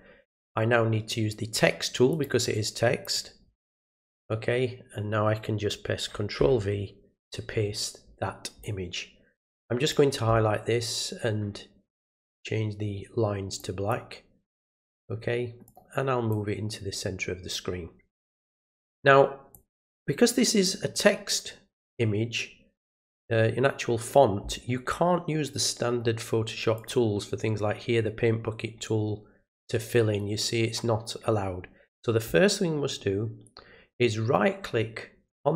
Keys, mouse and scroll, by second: 2.1 click, 3.0 click, 8.6-9.9 drag, 12.2-13.9 drag, 14.7 click, 15.6 click, 16.3-18.8 drag, 19.5-20.6 drag, 26.7 click, 34.3 right click.